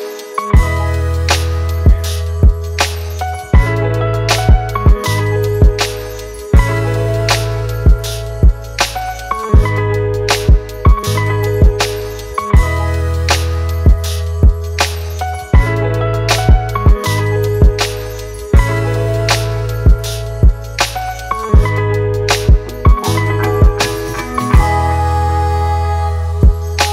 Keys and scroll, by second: 11.4 ctrl+t.